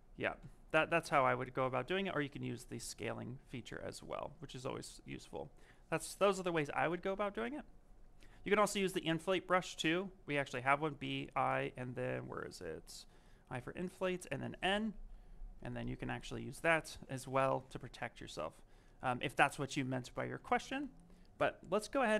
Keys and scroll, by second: 10.9 i, 15.1 s, 18.2 ctrl+z.